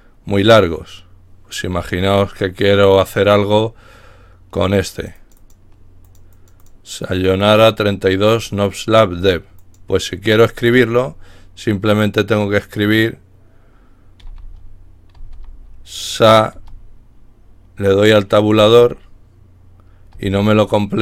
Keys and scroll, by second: 9.8-10.5 typing, 14.6-15.3 typing.